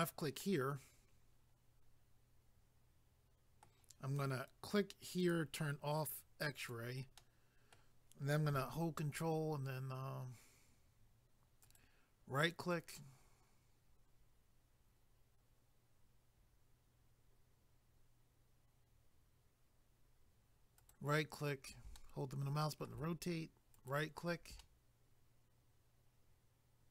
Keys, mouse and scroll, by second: 0.4 middle click, 5.2 click, 6.6 click, 7.2 middle click, 11.6 ctrl+right click, 20.8 ctrl+right click, 22.0 middle click, 23.7 ctrl+right click, 24.6 middle click.